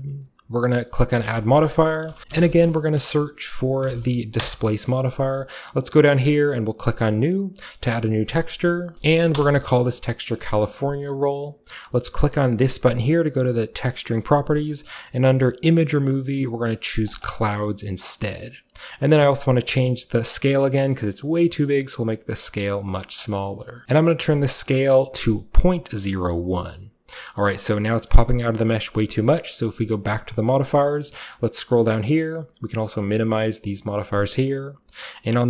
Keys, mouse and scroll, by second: 0.0-0.7 scroll down 1, 0.7-1.2 scroll down 1, 1.2 click, 2.1-4.9 typing, 2.2 ctrl+z, 5.4-6.9 scroll down 1, 6.9 click, 8.3 click, 8.7-9.5 typing, 13.6 click, 15.7 click, 17.1 click, 17.5-18.2 scroll down 1, 18.2-19.4 middle drag, 19.4-22.9 shift+drag, 23.8 Return, 24.7 click, 26.3 click, 26.5-27.6 scroll down 1, 26.6-30.1 middle drag, 27.6-29.1 scroll down 1, 29.1-29.9 scroll down 1, 29.9 scroll down 1, 30.1 click, 30.8-32.1 scroll down 1, 32.1 scroll down 1, 32.2-33.0 scroll up 1, 33.0 click, 33.0 scroll up 1, 34.5 click.